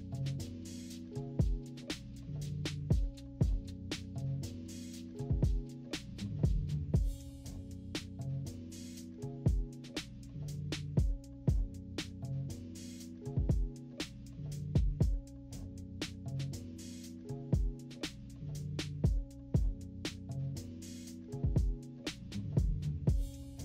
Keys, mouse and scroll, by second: 2.9 click, 4.2 click, 5.4 -, 5.6 scroll up 2, 5.7 =, 5.8 scroll down 3, 6.6 click, 8.9 click, 9.4 click, 10.6 click, 11.0 click, 11.7 click, 13.9-15.3 typing, 14.3 scroll up 1, 15.7 scroll up 2, 16.1 click, 17.2 click, 18.3 click, 20.1 click, 20.5 click, 21.7 -, 21.9 scroll down 1, 22.1 =, 23.1 click.